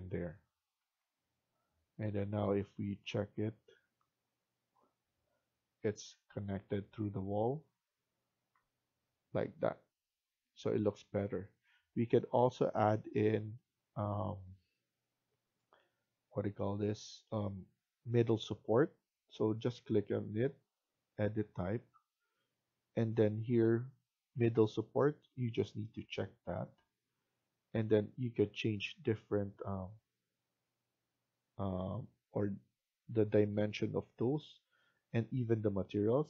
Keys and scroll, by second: 0.7 Escape.